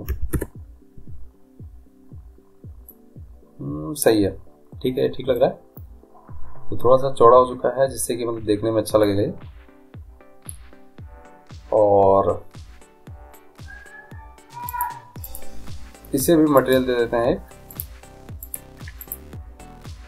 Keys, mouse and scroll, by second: 3.1-7.5 middle drag, 8.9-10.9 middle drag, 10.9-12.4 scroll down 1, 12.4-13.7 scroll down 1, 14.9-20.0 drag.